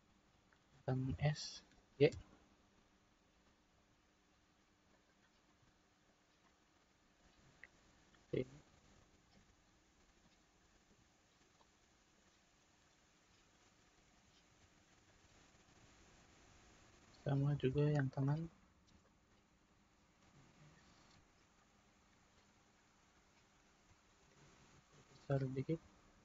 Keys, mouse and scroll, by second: 1.1 s, 5.4-8.6 middle drag, 8.6-9.0 scroll down 1, 9.0-14.6 shift+middle drag, 14.6 Tab, 15.0-17.0 middle drag, 17.0 click, 17.6 Tab, 18.2 middle click, 18.9 click, 20.3 s.